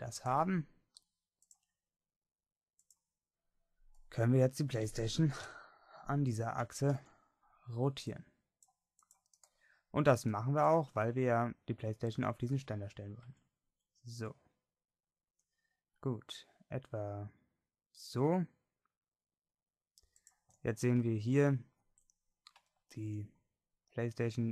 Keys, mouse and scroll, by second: 1.4 middle click, 2.1-5.4 drag, 5.4 KP_1, 6.5 a, 7.0 c, 13.3 r, 20.8 middle click.